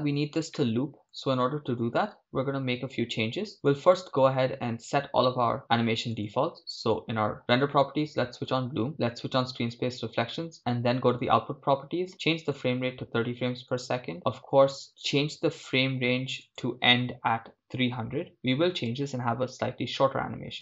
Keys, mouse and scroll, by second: 0.6-1.9 shift+middle drag, 2.0 shift+space, 3.6-10.5 drag, 11.1-14.1 drag, 14.1 scroll down 2, 16.4-20.2 drag, 20.5-20.6 drag.